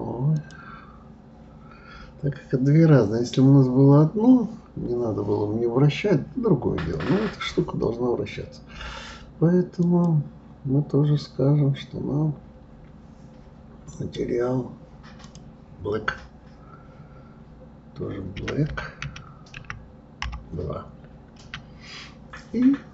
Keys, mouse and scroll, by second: 0.3 click, 9.8 click, 13.9 click, 15.2-18.2 drag.